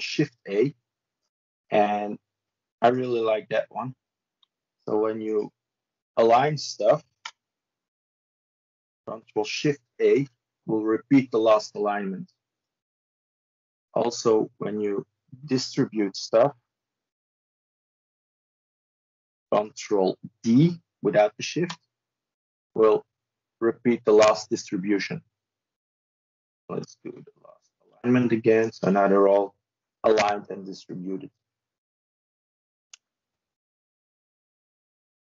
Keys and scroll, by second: 9.8 ctrl+shift+a, 21.4 ctrl+d, 27.5 ctrl+shift+a.